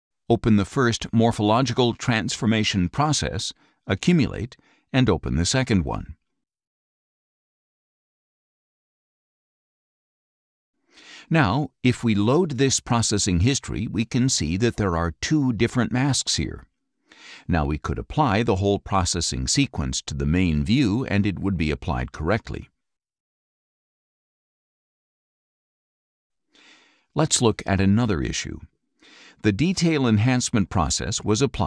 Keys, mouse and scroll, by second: 0.8 click, 2.4 click, 5.2 click, 7.4 click, 9.5 click, 11.6 right click, 12.9 click, 15.4 click, 29.8 click.